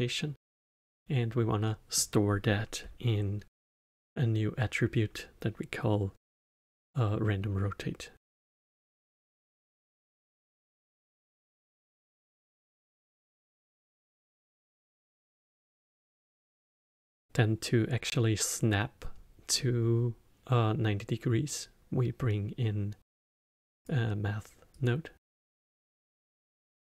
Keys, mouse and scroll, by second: 14.0-16.2 middle drag, 16.2 shift+a, 25.5-26.8 drag.